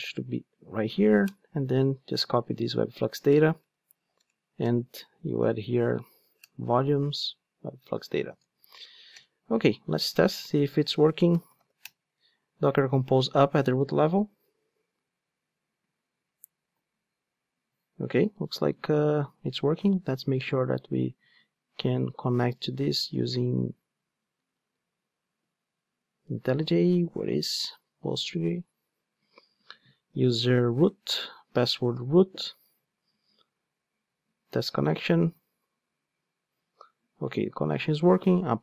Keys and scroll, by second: 0.1 Tab, 2.4 super+c, 6.5 Return, 7.1 super+v, 10.4 alt+F12.